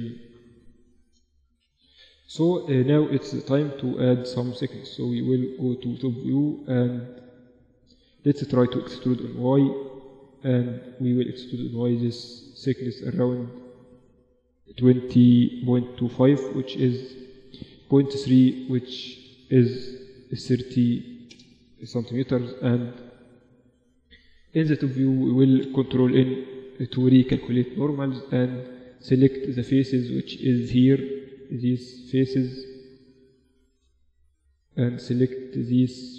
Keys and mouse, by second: 0.6 Tab, 1.3 Tab, 3.0 KP_7, 4.7 a, 5.0 a, 8.4 e, 21.6 KP_1, 23.0-24.7 middle drag, 23.5 z, 24.5 a, 24.7 a, 25.5 ctrl+n, 25.9 Tab, 26.4 Tab, 26.7 z, 28.7 click, 29.2-30.6 middle drag, 32.5 a, 32.6 z, 34.0 shift+click.